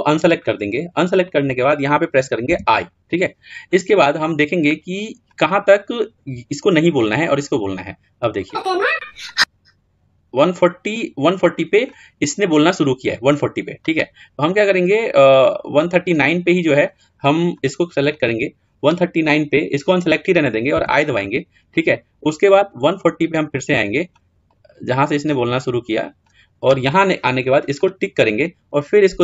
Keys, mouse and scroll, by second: 9.3-11.9 drag, 15.1-29.2 drag.